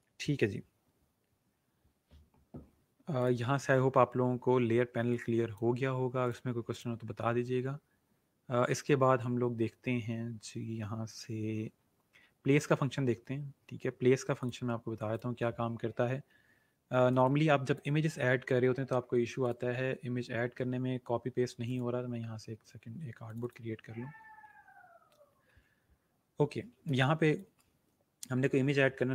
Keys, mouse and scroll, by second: 3.2 click, 5.2 click, 16.7-17.1 alt+scroll down 2, 17.1 space, 17.2 click, 17.6 space, 19.4 click, 21.6 click, 24.6-25.2 alt+scroll down 1, 25.5-26.0 scroll down 1, 26.9 space, 27.2 click, 27.4 space.